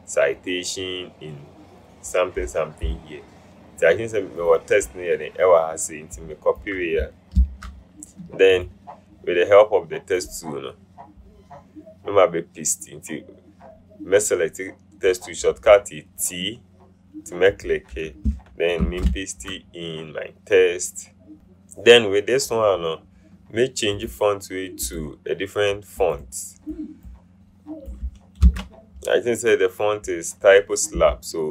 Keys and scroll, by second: 7.6 ctrl+c, 18.9 ctrl+v, 21.3 ctrl+c, 28.6 ctrl+v.